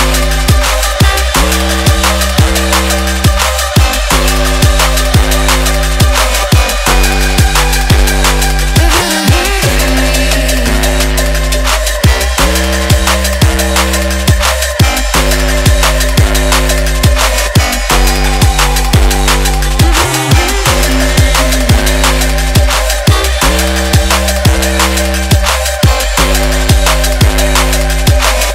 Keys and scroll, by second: 12.2 b, 12.4 g, 16.3 ctrl+=, 22.9 z.